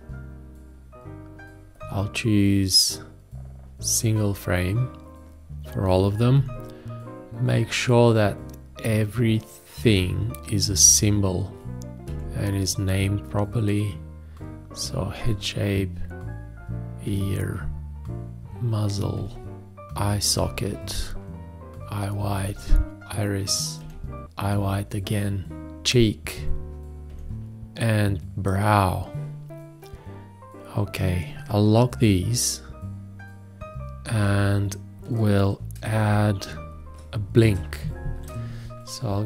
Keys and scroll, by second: 36.1 space.